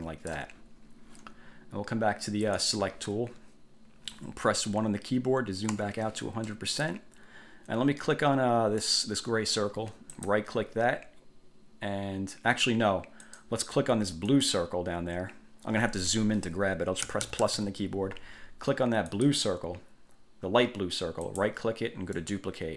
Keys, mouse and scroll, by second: 2.7 click, 5.9 1, 6.7 click, 9.0 click, 10.3 click, 13.4 click, 14.5 click, 17.2 =, 19.3 click, 21.4 click, 22.3 click.